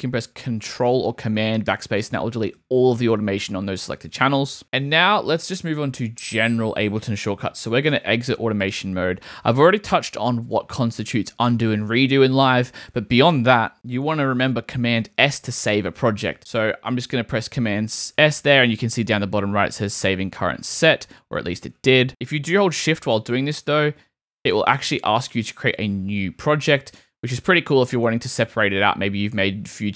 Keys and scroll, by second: 1.7 super+BackSpace, 3.9 super+z, 7.9 a, 17.7 super+s, 21.6 super+s, 23.2 shift+super+s.